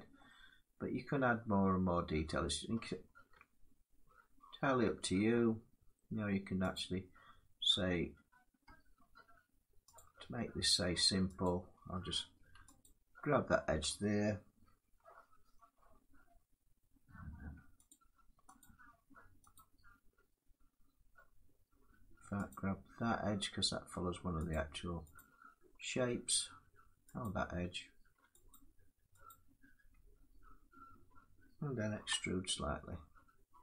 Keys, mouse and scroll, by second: 0.4 scroll, 2.0 middle click, 3.0 Tab, 3.5 scroll down 3, 4.3 middle click, 4.6 Tab, 4.9-5.4 scroll, 6.1-6.4 scroll down 3, 6.4 click, 6.8-7.4 scroll, 8.1 scroll down 3, 8.3 Tab, 9.3 scroll, 9.6 click, 11.1 click, 12.5 alt+click, 17.6 click, 18.3 click, 19.4 click, 20.4 click, 20.8 middle click, 20.8-21.1 scroll down 1, 22.2 click, 24.2 click, 24.8 click, 26.9 click, 28.2 alt+click, 28.3 alt+click, 29.0 click, 31.6 e.